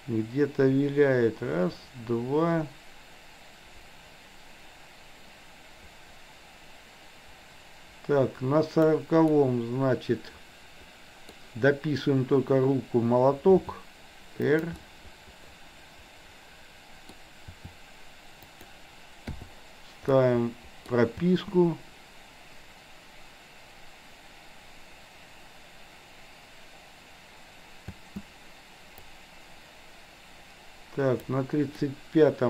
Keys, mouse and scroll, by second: 9.4-11.2 middle drag, 13.5 r, 14.9-17.1 middle drag, 17.5 r, 19.4 i, 20.1-21.0 middle drag, 21.2 space, 28.0 space, 29.1 click, 31.9-32.4 middle drag.